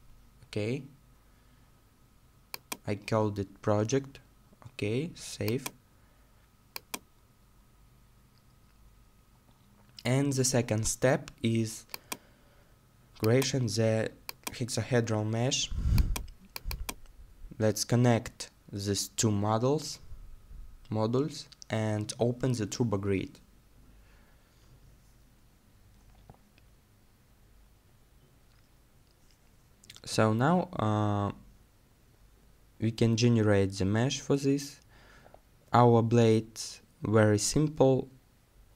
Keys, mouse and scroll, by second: 9.5-12.1 scroll down 1, 27.5-29.2 scroll down 1, 29.2 middle click, 38.5 middle click.